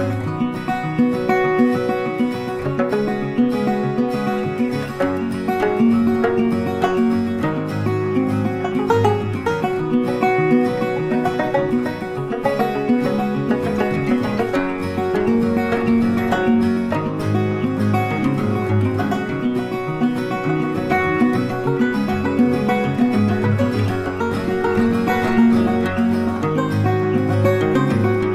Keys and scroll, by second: 12.4 ctrl+t.